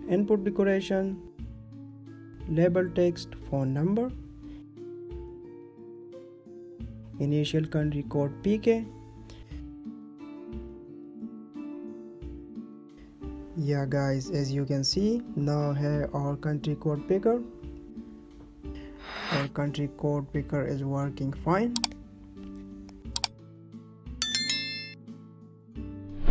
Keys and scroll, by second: 0.9 space, 3.1 Down, 4.7 space, 5.7 Right, 6.2 ctrl+s, 11.0 ctrl+s, 14.3 ctrl+s, 17.6 ctrl+a, 25.1 ctrl+s.